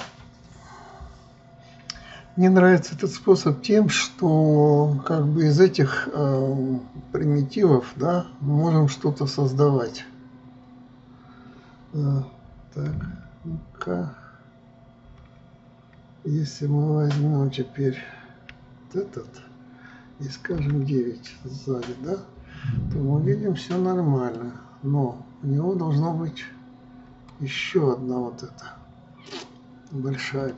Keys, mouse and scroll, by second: 13.5 KP_9, 15.7 KP_9, 19.1 KP_1, 21.1 KP_9, 25.0-28.0 middle drag.